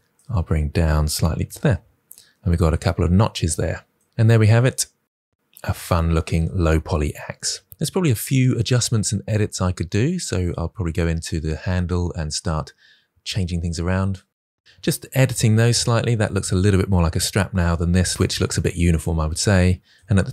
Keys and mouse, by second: 0.4 g, 1.0 click, 1.3 Tab, 8.0 KP_1, 8.7 Tab, 9.2 alt+z, 9.7 r, 9.9 click, 9.9 g, 10.1 click, 10.9-14.2 typing, 11.1 click, 11.3 click, 11.6 click, 12.0 click, 12.4 click, 14.0 click, 14.3 click, 14.5 Tab.